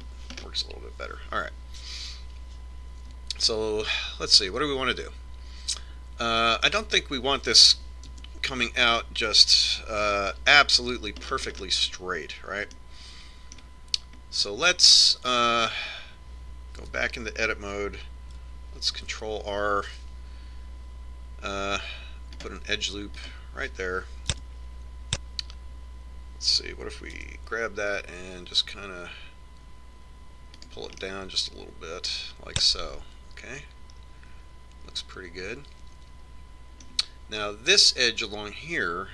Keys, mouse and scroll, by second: 0.6-4.1 middle drag, 5.2-7.2 middle drag, 9.8 KP_3, 11.8 KP_5, 13.0-15.1 middle drag, 15.3-16.3 middle drag, 16.7-18.5 middle drag, 18.7 Tab, 20.8 ctrl+r, 26.2 KP_3, 29.1 g, 32.9-34.8 middle drag.